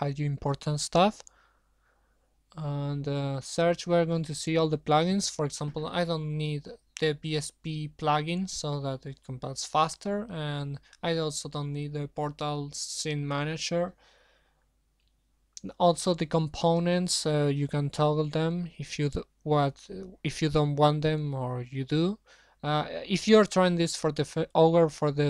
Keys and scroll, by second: 21.2 shift+Home, 21.3 shift+Delete.